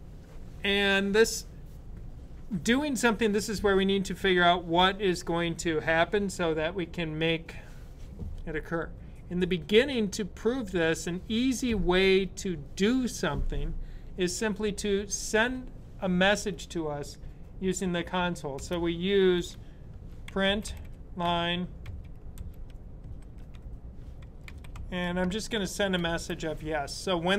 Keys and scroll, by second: 19.7-22.8 typing, 23.9-25.8 typing.